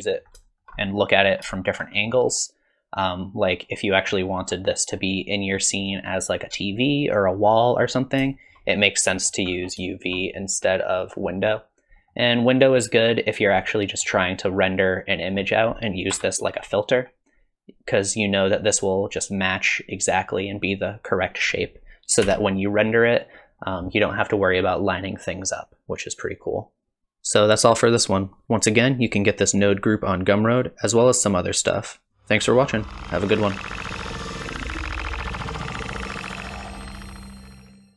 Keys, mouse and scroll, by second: 0.0 middle click, 0.5 shift+middle click, 0.8 middle click, 1.3 scroll up 1, 1.6 shift+middle click, 2.0-2.3 scroll down 2, 2.3 middle click, 4.4-4.9 scroll down 2, 4.9 scroll up 1, 5.9-7.5 scroll up 1, 7.5 scroll up 1, 7.8-8.4 scroll down 4, 8.4 shift+middle click, 8.7 middle click, 9.5-9.9 scroll up 2, 9.9 shift+middle click, 12.0 middle click, 12.9 click, 13.6 middle click, 14.8 click, 16.1 KP_0, 17.0-17.8 scroll down 1.